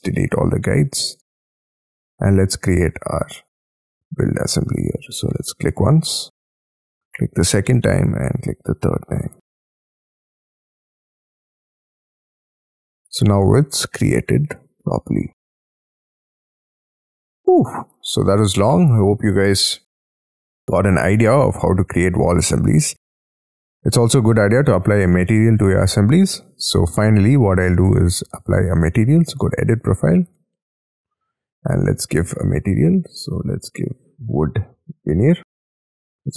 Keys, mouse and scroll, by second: 1.7 shift+middle click, 2.0 Escape, 4.5 scroll up 2, 5.4 shift+middle click, 9.7-10.1 scroll up 3, 10.1 space, 10.8-11.4 scroll up 6, 11.4 Escape, 11.6 middle click, 12.1-12.7 scroll up 11, 12.7 middle click, 15.2-16.7 scroll down 17, 16.3 shift+middle click, 16.8 middle click, 18.1-20.6 scroll up 12, 20.6 middle click, 23.2-25.4 scroll down 21, 25.4-28.5 scroll up 6, 32.2-35.5 scroll down 13.